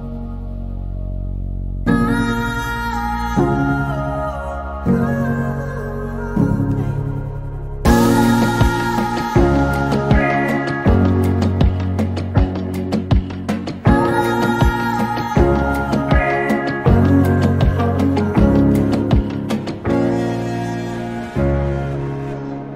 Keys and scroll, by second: 14.4 |, 17.4 typing, 18.5 q, 21.7 m.